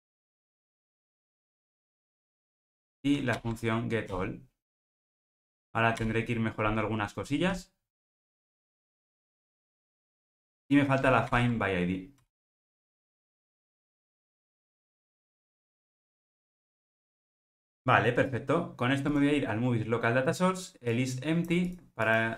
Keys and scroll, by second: 0.4 alt+Return, 3.3 alt+Return, 11.3 alt+Return, 12.8 Return, 17.0 alt+super+[.